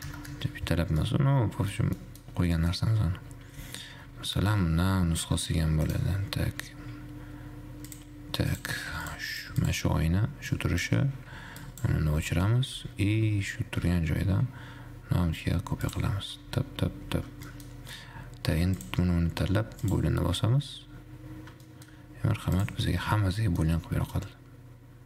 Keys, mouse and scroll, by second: 1.2-3.2 middle drag, 3.2 scroll up 2, 3.4 Tab, 3.7 a, 4.2 Tab, 4.7 middle click, 4.8-5.8 scroll down 1, 5.8 shift+d, 6.7 ctrl+z, 8.7 click, 9.2 click, 9.8 click, 10.7-11.8 drag, 12.7 shift+middle click, 13.0 alt+z, 13.5 alt+z, 14.2 shift+d, 16.2-16.7 scroll down 3, 16.7 shift+r, 17.2 shift+r, 17.7-19.2 middle drag, 19.2 shift+click, 20.2-21.9 drag, 21.9-22.2 shift+middle drag, 22.2-22.7 scroll up 2, 22.7 click, 23.3-23.9 middle drag, 23.9-24.3 scroll up 1, 24.3-25.0 middle drag.